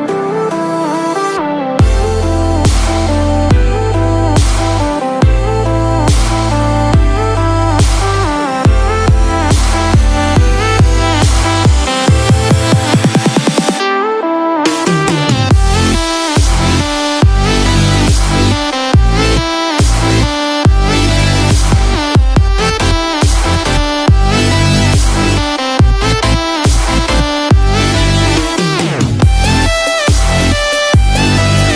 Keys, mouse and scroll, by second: 1.6 Tab, 1.6 scroll down 1, 12.3 click, 12.3 middle click, 17.6 ctrl+KP_Add, 23.0 ctrl+click, 28.3 Tab, 28.3 middle click, 28.3 scroll up 1, 28.4 middle click, 29.1 click, 29.9 middle click.